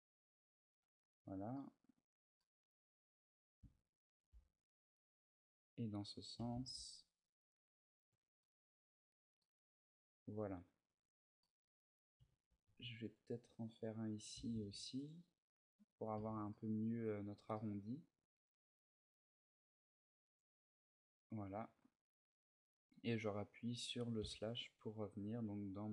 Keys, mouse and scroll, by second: 0.6 Tab, 0.9-1.4 scroll up 2, 1.4 middle click, 2.2 middle click, 2.8 scroll up 2, 4.0 ctrl+r, 6.1 click, 6.2 a, 6.4 ctrl+r, 7.9 Tab, 8.2 click, 8.2 middle click, 8.8-10.0 scroll down 4, 9.2 middle click, 10.0-10.4 scroll up 1, 10.7 Tab, 10.7-11.2 scroll up 3, 11.9 a, 12.4 ctrl+r, 14.0 click, 14.1 a, 14.4 ctrl+r, 15.9 click, 16.1 Tab, 16.1 a, 16.3 middle click, 16.9-17.3 scroll down 2, 17.3 middle click, 18.8 middle click, 21.6 middle click, 23.9 KP_Divide, 25.4 middle click.